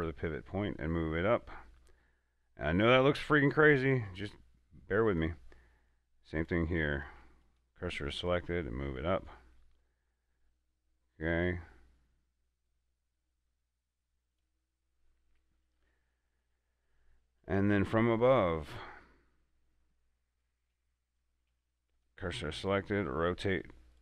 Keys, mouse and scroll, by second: 0.9 r, 5.4 r, 5.4 click, 6.7 right click, 7.3 shift+s, 7.7 click, 8.7 r, 14.6 click, 20.6 right click, 21.8 shift+s, 22.1 click, 23.3 r.